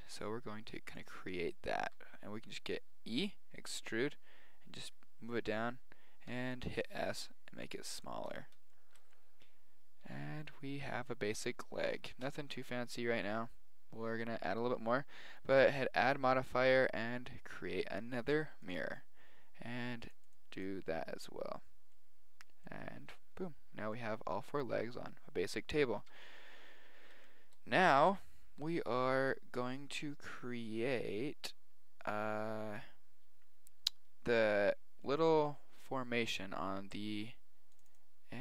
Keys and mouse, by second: 0.9-2.7 drag, 1.8 e, 5.3-7.1 middle drag, 6.3 s, 7.3-8.7 middle drag, 10.0 z, 12.4 Tab, 15.7-17.4 drag, 20.0-22.0 drag, 22.4-26.3 middle drag, 26.0 KP_1, 26.9-29.9 middle drag, 35.0 middle click.